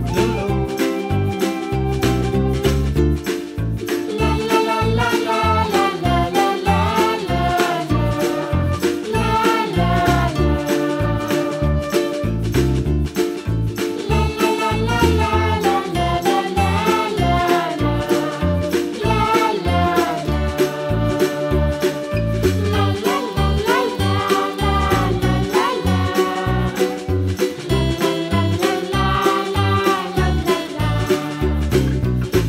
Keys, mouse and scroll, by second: 0.8 s, 2.7 s, 4.6 s, 6.5 middle click, 6.9-7.2 scroll up 1, 7.2-8.8 middle drag, 8.8 s, 9.9-11.4 middle drag, 12.5 g, 13.7-15.2 middle drag, 16.0 middle click, 16.6 s, 18.2-19.4 middle drag, 19.4 g, 21.2 shift+d, 23.2-24.5 middle drag, 24.5 click, 26.5 click, 27.7 l, 28.4 g, 30.3 middle click, 30.8-31.3 scroll down 3, 31.4 scroll down 1, 31.9 Tab, 32.1 middle click.